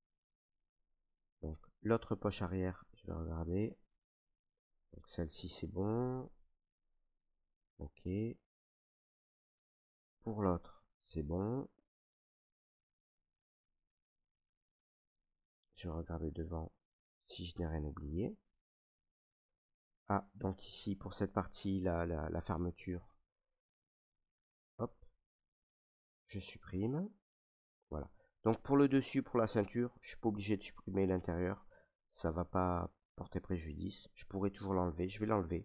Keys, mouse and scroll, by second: 0.0 click, 0.3 ctrl+right click, 0.5 ctrl+right click, 2.2 right click, 3.1 right click, 3.9 ctrl+right click, 6.9 right click, 7.7 ctrl+right click, 8.6 right click, 9.3 alt+right click, 10.4 ctrl+click, 10.7 ctrl+click, 12.0 alt+click, 12.8 ctrl+right click, 12.9 right click, 13.8 right click, 13.9 ctrl+right click, 15.7 right click, 15.8 ctrl+right click, 16.6 right click, 16.7 ctrl+right click, 17.5 alt+right click, 17.7 alt+right click, 18.6 ctrl+right click, 18.6 ctrl+right click, 20.1 right click, 20.8 ctrl+right click, 24.0 click, 25.8 click, 26.8 ctrl+right click, 28.2 right click, 30.4 right click, 30.8 alt+right click, 31.5 ctrl+right click, 35.0 right click.